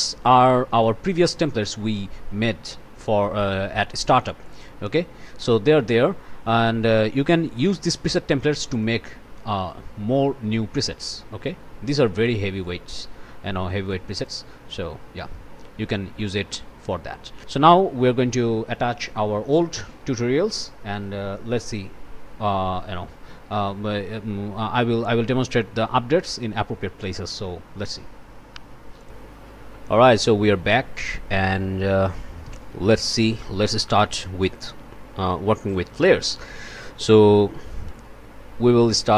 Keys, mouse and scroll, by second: 4.4 click, 6.9 click, 7.7 1, 8.8-11.1 drag, 12.2 click, 13.9 click, 16.2 click, 17.5 Delete, 18.0 click, 29.0 click, 31.1 click, 32.9 click, 38.9 r.